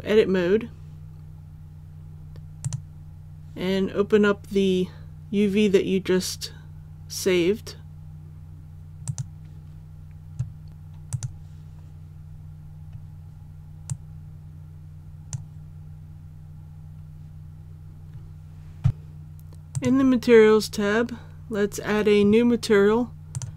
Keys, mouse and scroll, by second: 2.6 click, 12.3-12.6 scroll down 1, 13.9-15.7 drag, 15.7 scroll down 1, 19.7 click.